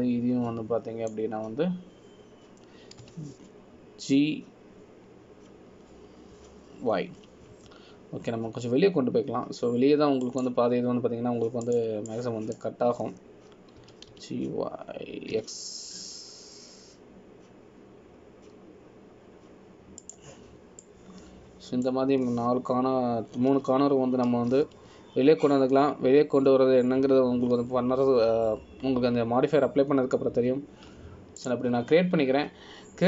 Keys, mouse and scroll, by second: 1.3 click, 13.8 click, 14.2 click, 16.0 g, 23.0 click, 25.7 g.